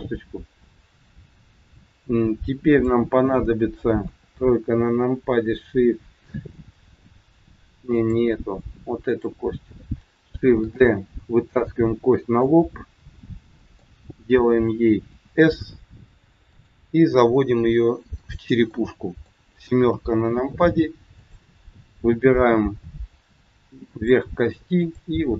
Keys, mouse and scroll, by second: 0.9-1.5 scroll down 2, 2.6 click, 2.6 scroll down 1, 4.0 KP_3, 7.9 click, 9.0 click, 10.5 shift+d, 12.5 middle click, 15.1 s, 17.5 g, 18.7 middle click, 19.9 KP_7, 21.1 click, 22.8 g, 24.8 click, 25.1 g.